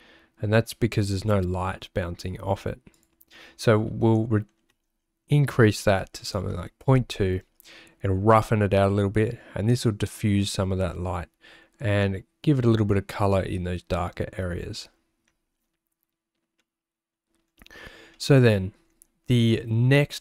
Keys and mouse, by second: 2.9-6.6 drag, 16.6 middle click, 18.2 middle click, 20.1 middle click.